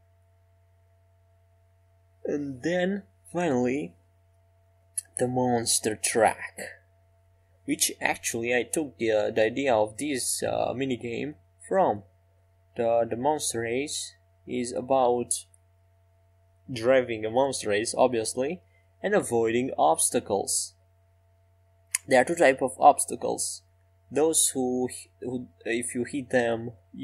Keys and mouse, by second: 0.5-3.1 drag, 3.6 Tab, 15.2-16.8 drag, 15.2 e, 18.9 s, 23.7-25.3 drag, 25.7 middle click, 26.1 middle click.